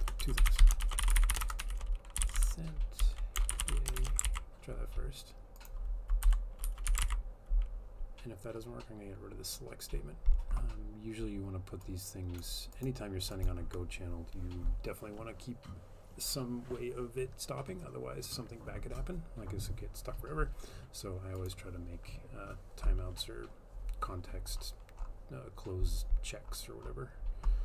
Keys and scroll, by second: 0.0 Return, 0.1-7.3 typing, 6.3 Left.